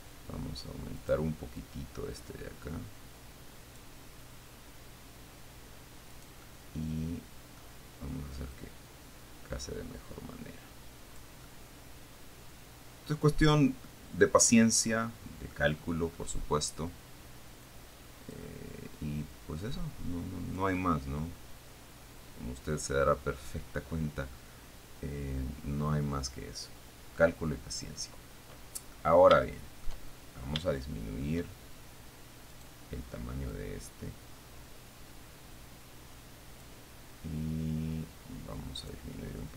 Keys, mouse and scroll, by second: 1.3 middle click, 1.8-4.2 drag, 6.4-8.1 right drag, 9.0-11.6 drag, 11.7-13.6 middle drag, 14.1-16.1 middle drag, 16.1-16.6 scroll up 1, 16.6-17.2 scroll up 1, 18.1 click, 19.9-21.0 drag, 21.0-23.3 middle drag, 23.3-23.6 scroll down 1, 24.9-27.6 middle drag, 29.4 shift+middle click, 29.7 shift+middle click, 31.0 shift+middle click, 32.8 right click, 33.8-37.1 drag, 39.1 middle click.